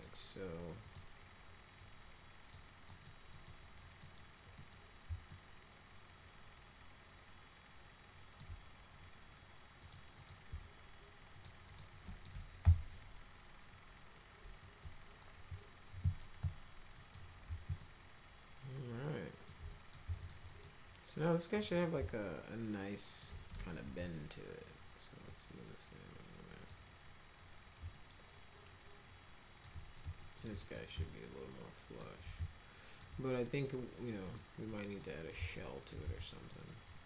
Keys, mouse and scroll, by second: 0.8 click, 1.8 click, 2.9 middle click, 3.3 middle click, 4.0 middle click, 4.6 middle click, 5.3-8.4 alt+middle drag, 9.8 click, 10.2 click, 11.3 ctrl+click, 11.7 ctrl+click, 12.1 middle click, 12.6 r, 14.6-16.2 drag, 17.0 middle click, 17.8-19.5 alt+middle drag, 19.7 middle click, 20.1 alt+middle click, 20.5 middle click, 21.5 click, 21.7 click, 22.1-23.2 alt+middle drag, 23.4 middle click, 23.8 w, 25.3-26.7 drag, 27.9-29.6 alt+middle drag, 29.8 middle click, 30.2 alt+middle click, 30.6 middle click, 31.1 alt+middle click, 32.4 alt+middle click, 34.2 click, 35.0 middle click, 35.6 alt+right click, 36.0 z, 36.5 middle click, 36.9 middle click.